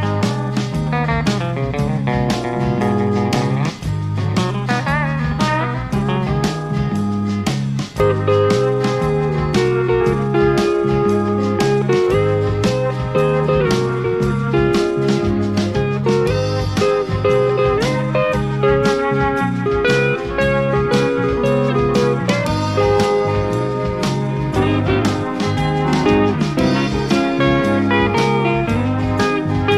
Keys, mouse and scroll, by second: 0.2-2.3 drag, 2.9 click, 4.0 click, 5.6 click, 7.3 click, 8.9 click, 9.9 click, 11.5 click, 12.3 click, 13.8 F1, 15.7 shift+F6, 17.1 click, 17.9 click, 19.2 click, 20.1 click, 21.2 click, 22.1 click, 23.1 click, 24.3 F1, 25.6 shift+click, 26.7 ctrl+KP_Subtract, 28.4 click.